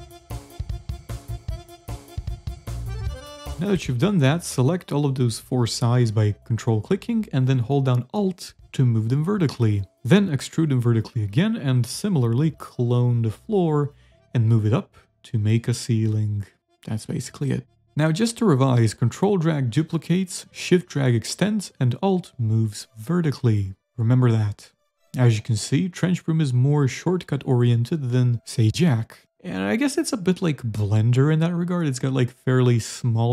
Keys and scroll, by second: 1.4 a, 7.1-10.8 typing, 13.8-16.5 typing, 14.2 alt+Tab, 18.9 w, 19.3 s, 22.2 s, 22.6 d, 24.6 a, 28.2 Delete, 29.4 a, 29.7 w, 30.4 s, 31.7 ctrl+a, 32.5 s, 32.9 v.